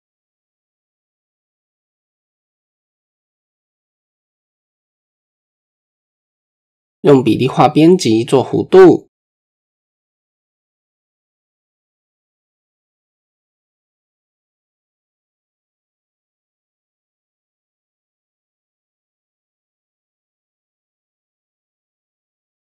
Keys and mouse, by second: 0.0 a, 0.9-1.8 drag, 2.6 KP_1, 4.5 shift+click, 5.0 Tab, 6.0 Tab, 6.4 KP_1, 6.6 KP_3, 8.2 click, 9.1-10.3 drag, 11.1 middle click, 11.6 click, 15.8 middle click, 16.4 KP_3, 17.3 shift+drag, 18.3-19.7 drag, 20.7 click, 21.5 a, 22.2-22.7 drag.